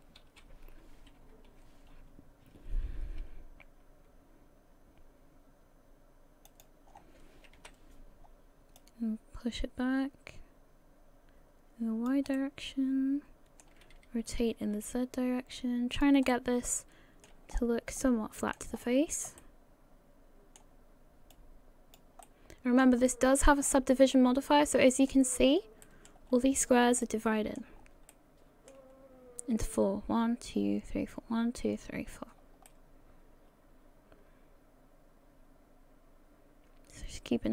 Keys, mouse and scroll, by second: 1.2 KP_1, 3.2 s, 6.9-7.6 scroll down 4, 7.6 KP_3, 8.8 click, 12.4 middle click, 14.2 r, 16.3 middle click, 17.5-17.9 scroll up 5, 18.0 shift+middle click, 18.7-19.4 scroll up 2, 19.4 middle click, 21.3 click, 22.2 middle click, 23.1 middle click, 23.7-24.1 scroll down 6, 24.1 middle click, 25.8 middle click, 26.3-26.8 scroll up 4, 27.0 shift+middle click, 27.9 scroll down 1, 28.1 middle click, 29.0 scroll up 1, 32.4-32.7 scroll down 1, 32.7 middle click.